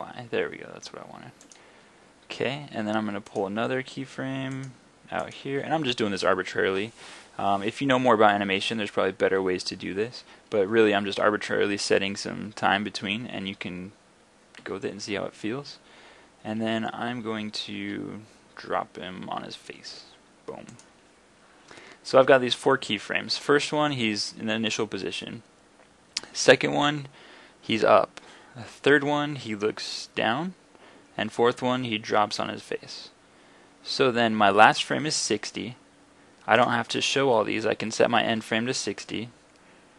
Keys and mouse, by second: 14.6 g, 20.9-26.1 drag, 26.5-28.6 middle drag, 36.6-39.9 drag.